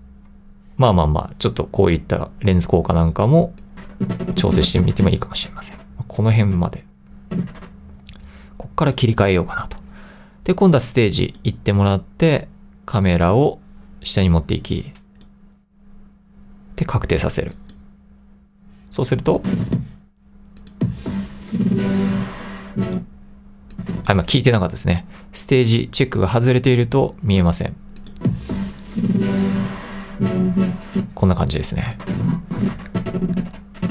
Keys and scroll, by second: 0.4 2.